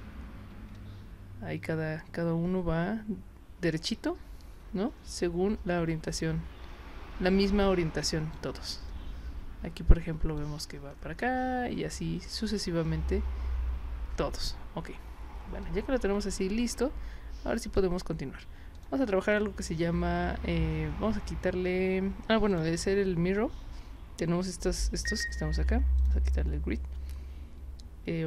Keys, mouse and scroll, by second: 0.7-8.3 alt+drag, 8.9-10.3 alt+drag, 15.6-17.8 alt+drag, 18.7 click, 19.3 click, 22.5 click, 26.0 click.